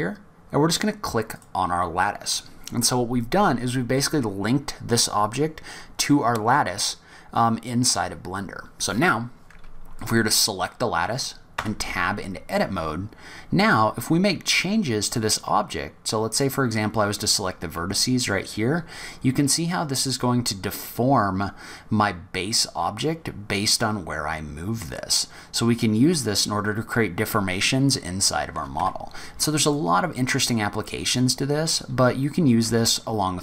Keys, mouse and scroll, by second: 9.9 click, 11.5 Tab, 15.4 click, 17.7 g, 29.7 click, 32.6 s.